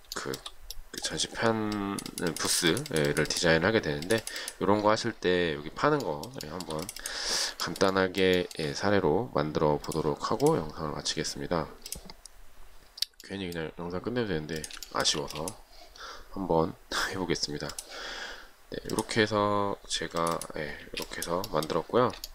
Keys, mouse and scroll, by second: 0.4 shift+middle click, 6.7 shift+middle click, 7.9 shift+middle click, 8.6 shift+middle click, 15.1 shift+middle click, 15.3 shift+double middle click, 15.5 space, 21.1 space.